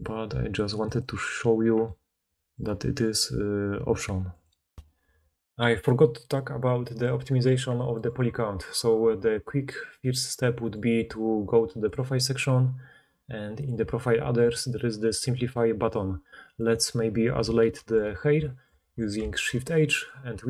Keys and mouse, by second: 4.3 middle click, 4.3 right click, 4.7 ctrl+alt+s, 10.6 click, 17.7 shift+h, 18.8 alt+a.